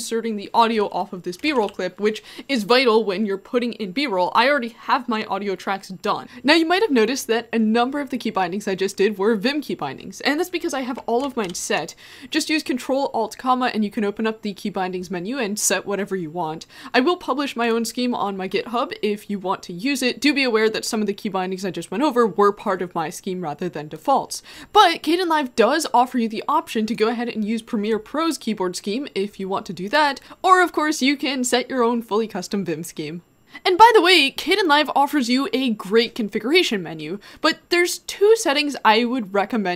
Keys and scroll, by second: 1.5 shift+h, 1.6 shift+h, 11.6 ctrl+alt+,, 29.9 Escape.